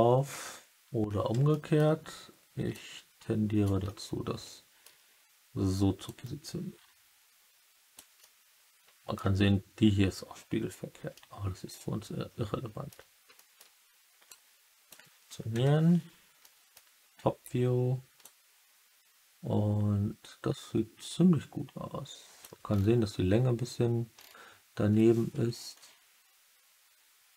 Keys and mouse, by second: 1.4 alt+middle drag, 2.6 click, 3.8-4.7 alt+middle drag, 6.0-7.9 drag, 8.1-8.9 alt+middle drag, 8.9 alt+click, 11.1 alt+drag, 11.3-12.8 alt+middle drag, 13.3 middle drag, 14.3-14.8 drag, 15.4 KP_7, 16.3-16.7 middle drag, 18.2-22.3 drag.